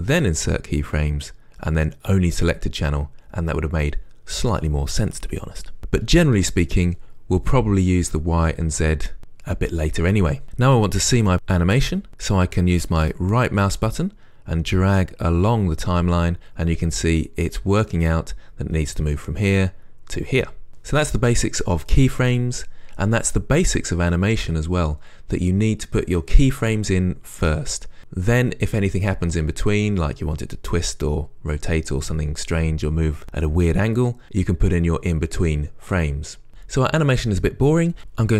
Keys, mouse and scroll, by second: 13.4-38.3 right drag.